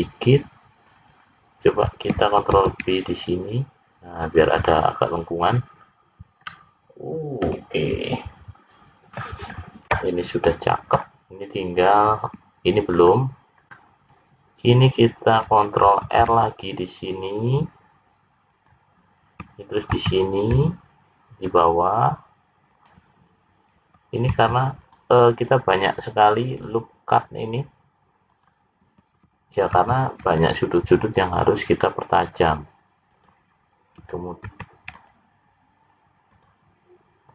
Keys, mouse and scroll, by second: 0.8 click, 1.1 click, 2.5 ctrl+b, 5.4 click, 6.1-6.4 scroll down 2, 6.4 middle click, 9.4-10.1 scroll up 5, 11.7 click, 12.9-14.1 scroll up 3, 14.1-14.7 scroll up 2, 15.7 ctrl+r, 19.9 ctrl+r, 24.3 ctrl+r, 29.8 ctrl+r, 34.5 ctrl+r.